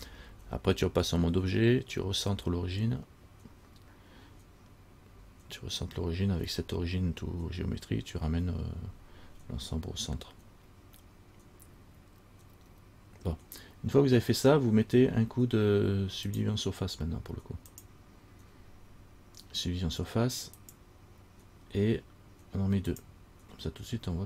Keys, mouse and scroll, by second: 16.5 click, 17.9 click, 23.1 click, 24.1-24.2 scroll up 3.